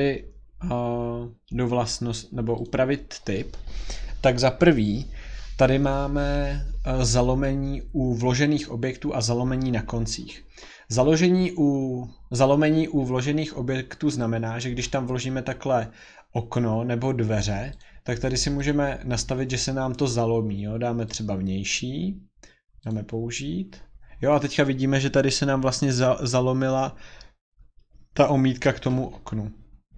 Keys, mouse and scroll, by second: 0.1 scroll, 1.0 scroll, 2.6 click, 4.8 scroll, 14.8 click, 17.8 click, 18.6 click, 21.1 click, 22.9 click.